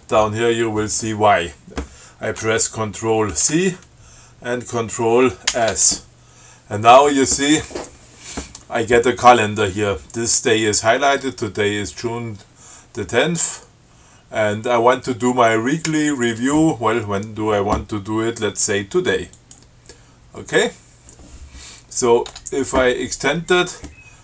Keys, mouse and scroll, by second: 3.6 ctrl+c, 5.7 ctrl+s, 19.6 click, 22.5 Tab.